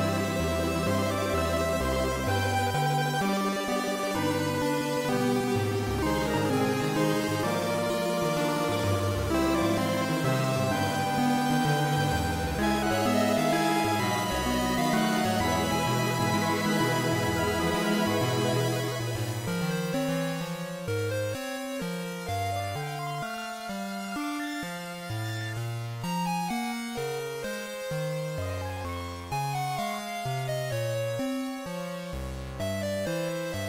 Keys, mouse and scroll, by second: 0.5 click, 2.9 click, 3.1 click, 12.6 click, 28.4 click, 28.9 g, 31.7 click.